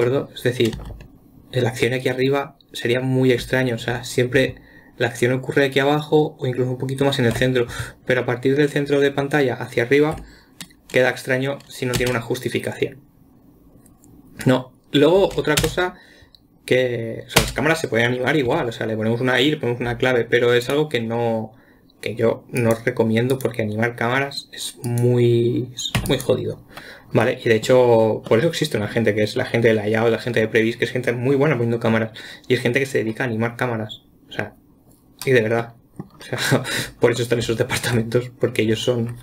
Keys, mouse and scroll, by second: 1.2 space, 3.9 space, 12.4 space, 15.6 space, 16.0 space, 21.0 click, 23.0 click, 23.7 click, 25.3 click, 26.4 x, 27.7-36.8 middle drag, 36.8-37.6 scroll up 2, 37.6-39.2 middle drag.